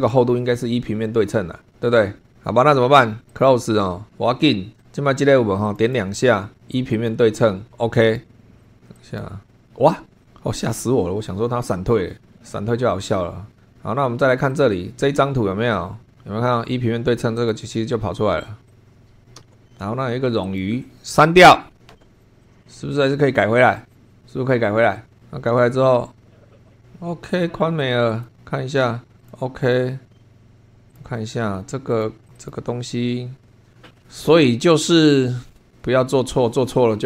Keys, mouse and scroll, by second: 3.3 click, 4.8 click, 5.7 click, 6.9 click, 8.0 click, 8.6 click, 8.9 click, 10.2 click, 13.7-14.3 scroll down 1, 14.3 click, 15.2-16.1 scroll up 2, 17.3 click, 18.7 click, 19.3 c, 20.5 click, 21.7 Delete, 22.2 click, 22.5 click, 23.9 click, 24.1 click, 26.7 click, 27.8 click, 29.2 click, 30.9 click, 31.9 click, 32.2 click, 33.4 scroll up 1.